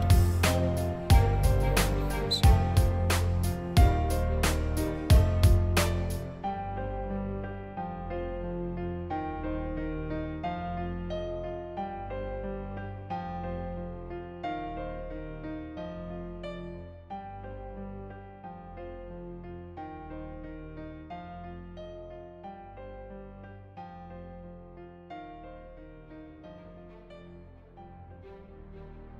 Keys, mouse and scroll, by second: 2.1-4.2 drag, 4.3 click, 5.0 click, 5.3 click, 5.7 click, 6.1 click, 6.5 click, 6.9 click, 7.5 click, 7.9 click, 8.5 click, 9.4 click, 9.5 click, 9.7 click, 10.1 click, 11.0-12.5 drag, 12.8 click, 12.9 click, 13.2 click, 13.5 click, 13.7 click, 13.8 click, 13.9 click, 14.2 click, 14.6 click, 14.7 click, 15.4 click, 16.1 click, 16.2 click, 16.4 click, 16.6 click, 17.0 click, 17.3 click, 17.4 click, 17.8 click, 18.5 click, 18.7 click, 19.0 scroll up 1, 19.8 click, 20.5 click, 23.4 shift+x, 23.7 click, 24.2 click, 25.3-26.6 drag, 26.7 click, 26.9 click, 27.0 click, 27.2 click, 27.7 click, 28.4 click, 28.6 click, 28.8 click.